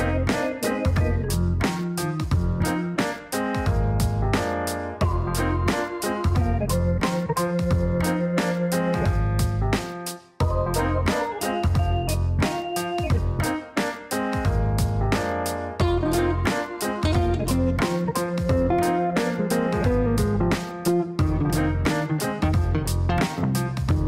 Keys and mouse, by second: 0.0-1.7 typing, 2.5 click, 2.7 click, 2.9 click, 4.0 KP_2, 4.1 KP_0, 5.6 click, 8.1 click, 8.3 click, 9.1 click, 9.9-14.3 typing, 15.6 click, 15.7 click, 15.9 click.